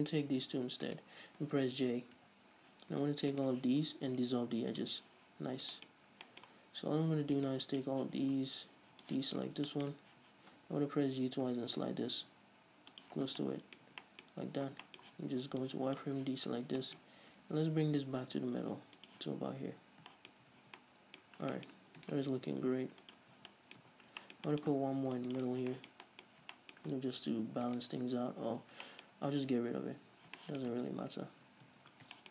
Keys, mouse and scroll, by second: 0.3-1.3 right drag, 2.6 j, 2.8-3.6 scroll up 1, 3.6 alt+right click, 4.1 x, 5.6-6.0 scroll down 1, 6.0-7.7 shift+middle drag, 6.2-6.6 scroll up 1, 7.7 alt+right click, 8.4 z, 9.4 ctrl+click, 10.0 shift+middle click, 10.4 z, 10.9 g, 13.3 shift+click, 13.5 scroll down 1, 13.6 Tab, 13.7-15.9 middle drag, 14.2 Tab, 14.6-15.1 scroll up 2, 15.4 z, 15.9 ctrl+click, 16.6 z, 17.1-19.4 middle drag, 17.6 g, 19.4 shift+click, 19.6 scroll down 1, 19.7 Tab, 20.4-22.3 shift+middle drag, 20.7 a, 21.5-21.8 scroll up 2, 22.3 right click, 22.6 g, 23.4 click, 23.6 scroll down 1, 23.7 Tab, 23.8-25.8 middle drag, 24.2 Tab, 24.2 scroll up 2, 25.3 ctrl+r, 25.8 click, 25.9 scroll down 1, 26.0-28.1 shift+middle drag, 26.6-26.9 scroll up 2, 27.5 ctrl+r, 28.1 right click, 28.6 ctrl+z, 30.3-32.3 middle drag, 30.3-30.7 scroll up 2, 31.2 ctrl+shift+z, 32.0 a.